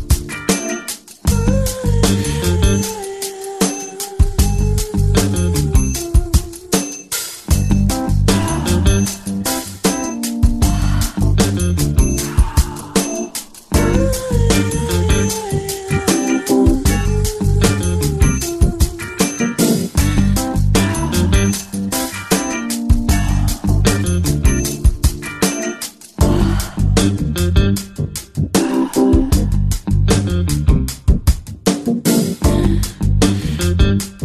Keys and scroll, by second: 17.8 b, 18.3 ], 18.8 ].